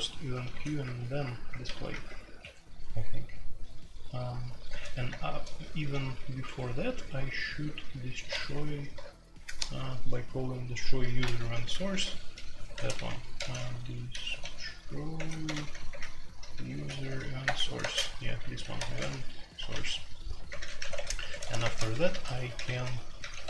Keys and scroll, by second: 0.1-1.9 typing, 2.4 Escape, 4.2-6.5 typing, 5.0 Return, 6.4 Escape, 8.4 shift+k, 11.7 super+k, 12.6-23.4 typing.